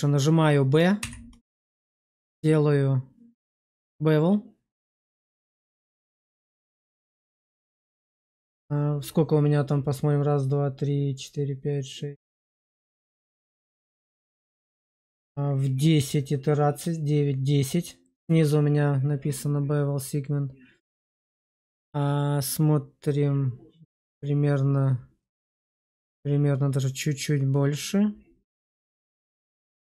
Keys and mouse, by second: 0.9 b, 29.1 click.